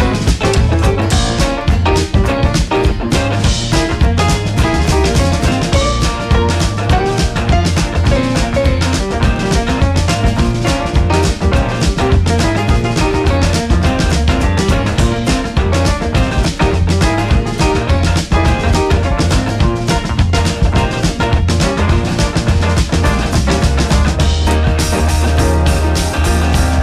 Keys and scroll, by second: 6.7 Up, 7.9 Up, 18.2 ctrl+c, 18.4 ctrl+v.